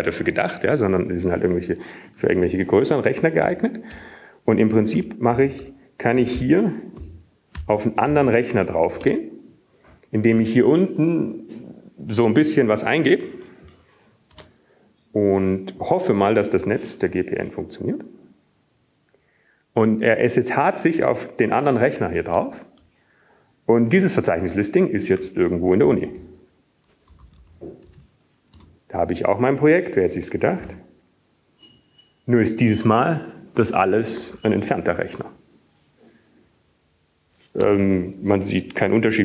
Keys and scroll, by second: 6.6 BackSpace, 6.7 BackSpace, 8.2-11.8 typing, 13.3 typing, 18.0 Return, 25.0-26.0 Down, 26.9-27.4 Down, 29.2 ctrl+x, 30.0-31.9 typing, 31.9 Return, 36.9-37.7 typing, 38.8-39.2 typing.